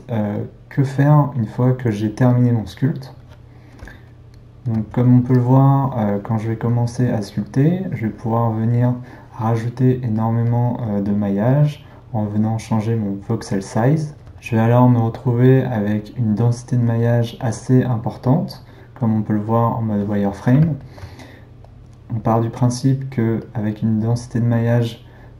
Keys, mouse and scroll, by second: 4.8 ctrl+r, 5.4-8.4 drag, 9.7-19.5 middle drag, 19.5-20.9 drag, 20.9 ctrl+middle click, 23.4-25.3 middle drag.